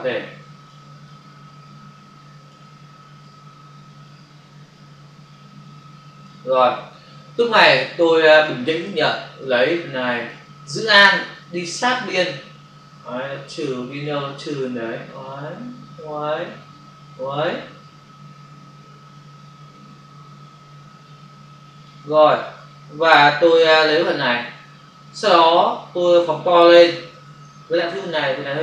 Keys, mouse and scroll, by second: 1.0 click, 3.2 click, 7.8 ctrl+click, 9.4 click, 11.3 alt+click, 22.6 click, 24.9 space, 25.3 click, 25.4 space.